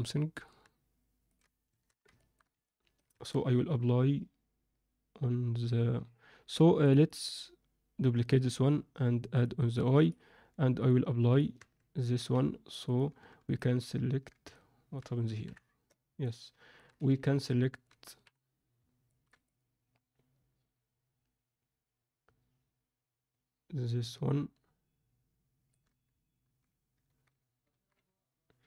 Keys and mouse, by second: 1.2 click, 1.7 Tab, 2.1 ctrl+middle click, 2.6 alt+middle click, 3.1 Tab, 6.8 click, 7.2-8.3 drag, 9.3 drag, 9.6 click, 9.9 click, 10.7-11.3 drag, 11.5 Tab, 12.1 z, 12.8 click, 13.5 shift+click, 14.5 alt+middle click, 15.4 KP_1, 16.2 alt+middle click, 16.9 z, 17.4 alt+middle click, 18.1 KP_1, 19.0 ctrl+middle click, 19.4-25.7 alt+middle drag, 26.4 ctrl+z, 27.0 ctrl+z, 27.7 ctrl+z.